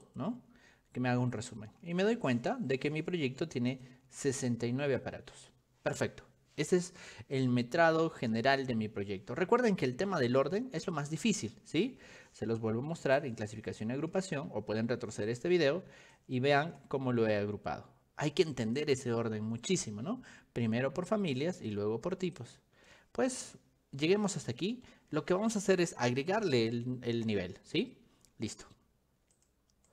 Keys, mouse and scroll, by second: 0.2 click, 3.1 ctrl+1, 4.4 ctrl+click, 10.2 g, 10.5 click, 13.2 click, 14.1 ctrl+1, 15.3 click, 16.2 ctrl+click, 18.3 click, 21.2 click, 22.4 click, 29.4 click.